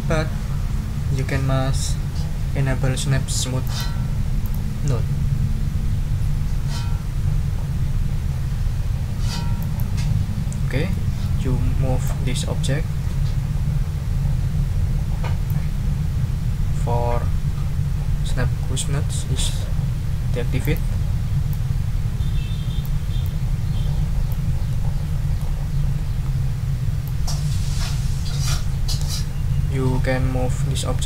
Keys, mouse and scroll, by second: 3.6 click, 4.4 click, 9.6 click, 10.9 click, 12.0-15.7 drag, 20.6 click, 21.5-23.0 drag, 23.2-24.5 drag, 24.7 click, 26.2 ctrl+scroll up 2, 27.0-31.0 drag.